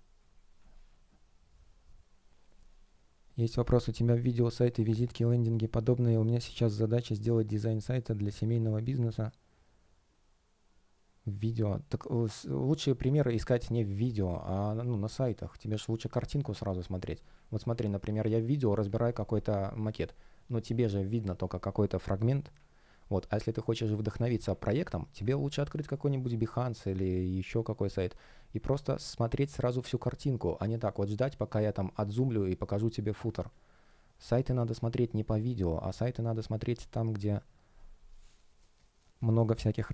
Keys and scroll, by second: 31.9 space.